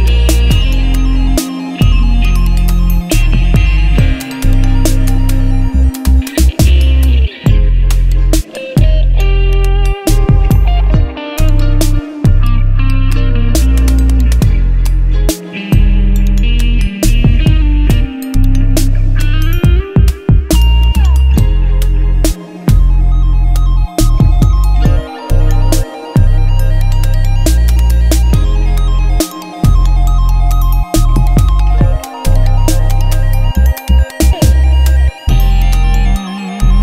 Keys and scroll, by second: 9.1 Return, 12.7 t, 15.3-19.8 typing, 20.3 Return, 21.8-24.0 typing, 25.1-31.0 typing, 30.5 ctrl+Return, 31.1 Left, 35.1 t.